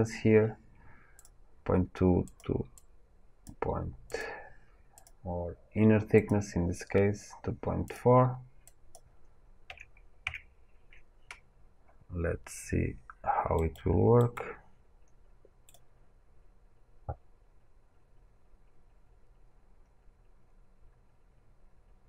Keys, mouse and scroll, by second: 4.9 click, 10.2 KP_Enter, 10.2-13.5 drag, 13.5-15.6 right drag, 15.6-22.0 drag.